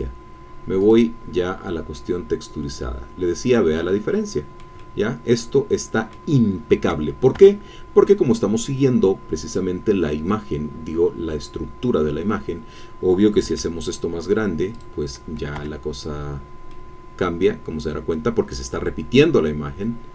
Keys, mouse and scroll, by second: 0.8 click, 1.9-7.0 drag, 7.4 Tab, 13.4 s, 14.7 click, 16.1 Tab, 16.7-20.1 drag.